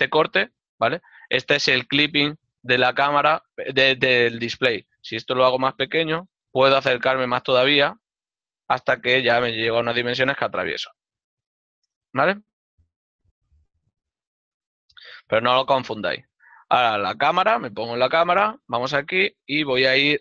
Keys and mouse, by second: 6.0 KP_0, 6.7 Return, 7.7 shift+middle click, 12.0 click, 12.6 Return, 14.1 middle click, 17.3 n, 19.5 KP_0, 19.8 click.